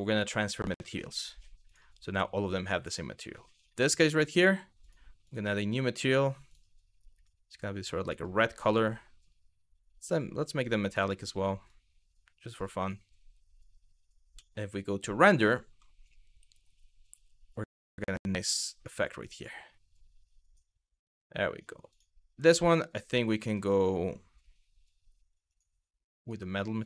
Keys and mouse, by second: 1.3 click, 3.7-4.5 drag, 4.9 click, 6.1 click, 11.3-12.1 drag, 14.0 z, 21.6 click, 25.1 click, 26.5 click.